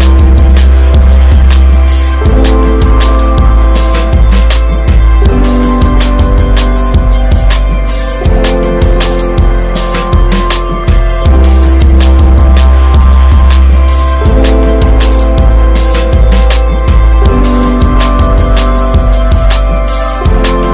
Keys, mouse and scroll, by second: 1.0-4.5 middle drag, 4.5-8.1 drag, 8.4 scroll down 1, 8.5-9.0 middle drag, 9.0-9.3 scroll up 1, 9.3-12.1 middle drag, 12.1 click, 13.3 drag, 14.0-19.0 drag, 19.0-20.7 middle drag, 20.1 ctrl+s.